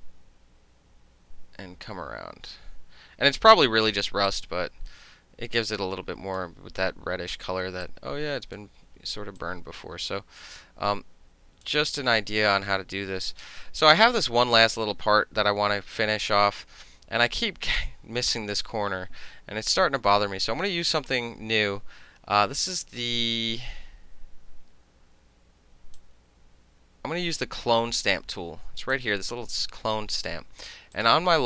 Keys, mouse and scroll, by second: 3.5 middle click, 4.3-6.4 drag, 6.4-7.9 middle drag, 7.9 click, 9.4-11.7 drag, 14.6 click, 26.0-27.7 drag, 29.0-30.0 drag, 30.0-31.0 middle drag, 31.0 click, 31.1-31.4 middle drag.